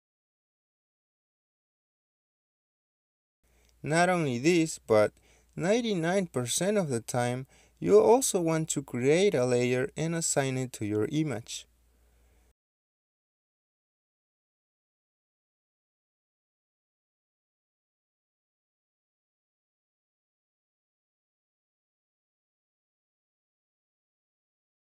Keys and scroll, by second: 8.1 Escape, 11.7 typing, 11.9 Return, 14.5-16.3 typing, 18.2 Return, 18.2 typing, 20.8 2, 21.3 Return.